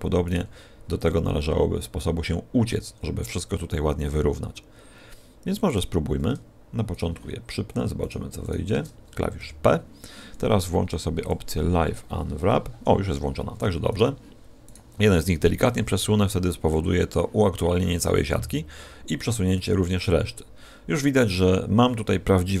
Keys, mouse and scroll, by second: 0.2 right click, 0.5 g, 1.0 click, 5.6 right click, 6.9 shift+right click, 7.9 shift+right click, 8.4 shift+right click, 9.3 p, 11.2 click, 13.9 right click, 14.6 right click, 19.5 g.